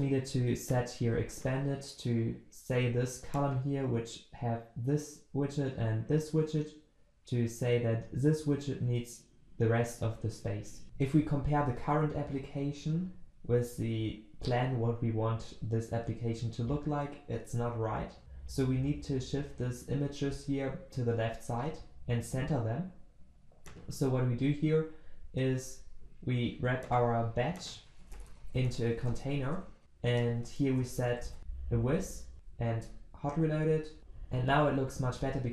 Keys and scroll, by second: 31.3 ctrl+v, 32.0 ctrl+s.